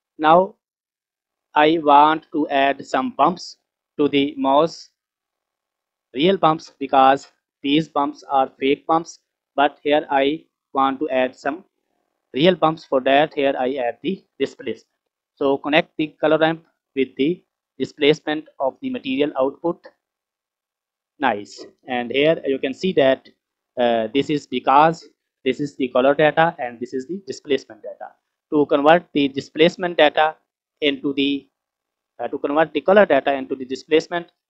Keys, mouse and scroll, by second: 0.4 scroll up 2, 0.9 scroll down 2, 7.0 scroll down 3, 7.1-7.9 middle drag, 9.7-10.4 middle drag, 14.6 middle click, 17.9-20.5 drag, 27.9 middle click, 29.6 click, 31.0-34.4 drag.